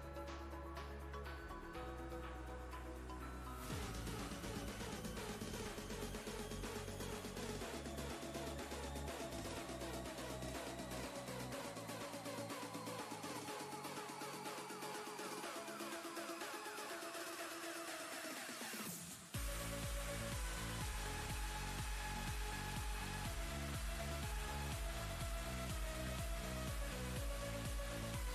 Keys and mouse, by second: 2.3 click, 4.5-6.4 alt+shift+click, 9.9 ctrl+z, 10.9 click, 12.3 ctrl+space, 12.6 ctrl+click, 12.9-13.2 ctrl+space, 13.6-14.3 click, 13.9 space, 14.8 ctrl+space, 16.3 click, 18.2-19.4 shift+drag, 22.4 ctrl+space, 22.5-24.4 ctrl+click, 23.0 ctrl+space.